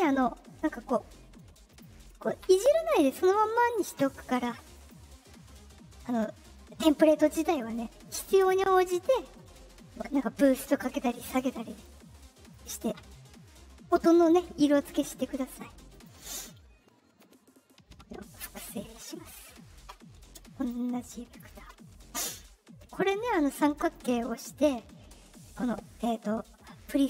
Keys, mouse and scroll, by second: 1.6 click, 4.7 click, 8.7 click, 12.4 click, 15.8 click, 17.1-18.6 drag, 20.5 click, 23.7 click.